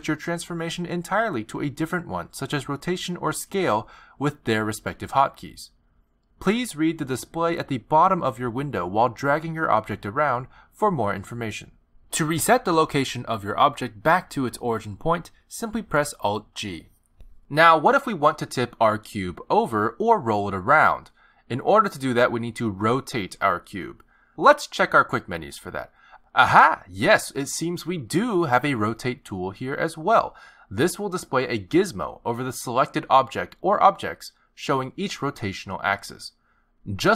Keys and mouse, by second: 10.8 g, 15.5 alt+g, 30.0 click.